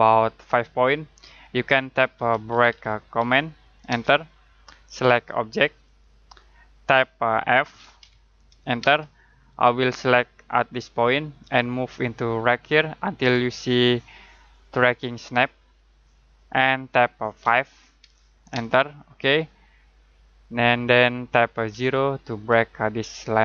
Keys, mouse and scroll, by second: 1.9-3.9 typing, 5.8 click, 8.0 f, 8.8 space, 17.4 5, 18.5 space, 21.7 0.